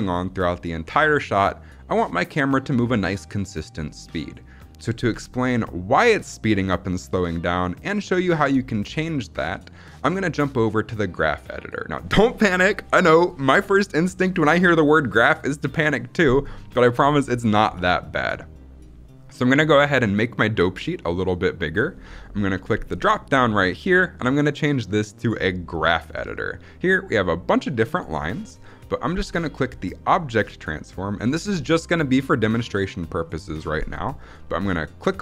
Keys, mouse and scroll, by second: 6.1-10.0 drag, 20.0-21.7 drag, 22.8-25.7 drag, 30.2 click, 34.9-35.2 drag.